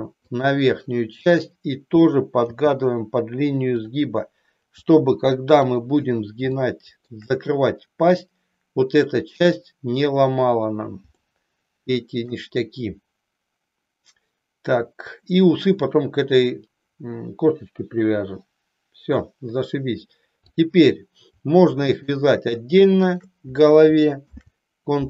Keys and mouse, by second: 1.2 click, 2.6 g, 4.9 g, 5.8 click, 6.6 shift+middle click, 11.4-12.5 shift+middle drag, 20.6 click, 22.0 shift+click, 23.1 shift+click, 24.4 ctrl+p.